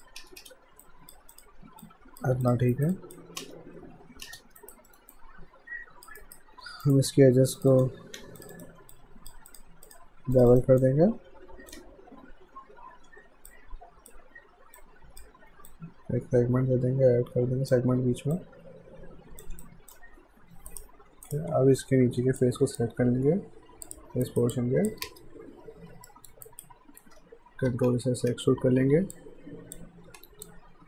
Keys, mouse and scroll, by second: 0.2 space, 0.8 alt+click, 1.8 alt+click, 2.7 alt+right click, 2.9 alt+click, 3.4 space, 4.6 alt+right click, 4.9 alt+middle click, 5.2 alt+click, 6.2 alt+right click, 6.6 q, 6.8 right click, 7.6 click, 8.4 click, 8.9 alt+click, 9.5 click, 10.4 shift+click, 10.8 alt+click, 12.9 ctrl+b, 13.5 alt+click, 18.4 click, 19.6 alt+click, 20.7 right click, 22.4 alt+click, 24.3 alt+right click, 24.5 alt+click, 25.1 space, 26.1 middle click, 26.4 right click, 27.7 e, 28.3 w, 29.1 click, 30.1 r, 30.5 click.